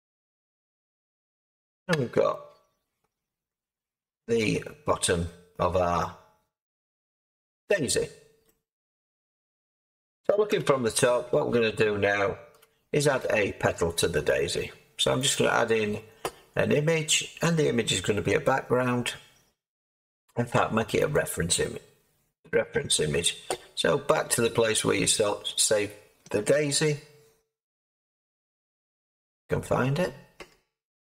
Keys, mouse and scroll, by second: 1.9 Tab, 7.6 middle click, 7.9-8.7 scroll down 5, 8.7-9.0 scroll down 1, 9.0-12.5 middle drag, 10.5 7, 12.5 7, 15.3-22.6 drag, 22.6-28.8 middle drag, 28.8-29.5 scroll up 2, 29.5-30.0 scroll up 8, 30.0 scroll down 1, 30.0-31.0 scroll up 12.